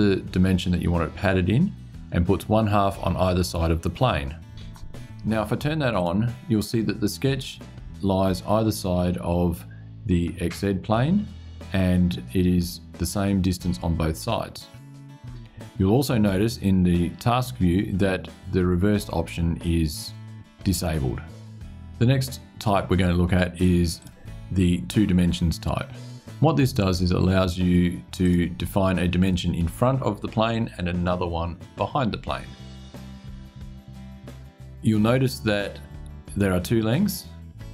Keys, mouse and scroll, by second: 4.1 click, 5.7 click, 23.7 click, 28.0 click.